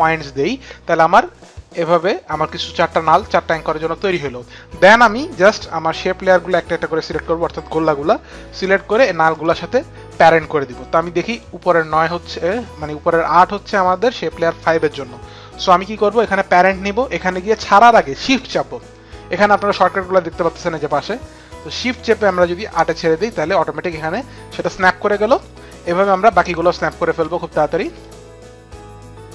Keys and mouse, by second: 4.8 click, 8.8 click, 10.8 click, 17.6 click, 26.6 click, 28.2 click, 28.6 shift+click.